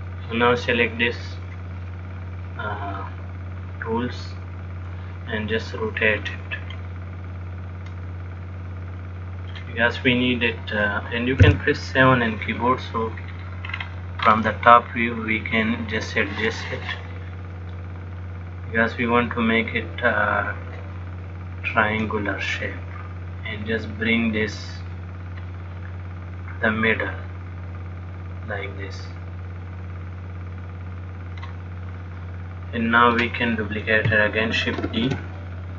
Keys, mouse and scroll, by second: 1.6 click, 3.2 middle click, 6.6 click, 10.2 middle click, 11.7 KP_7, 13.4-13.8 scroll down 3, 13.8-15.4 scroll up 7, 15.6 shift+middle click, 18.4 click, 21.9 click, 26.7 click.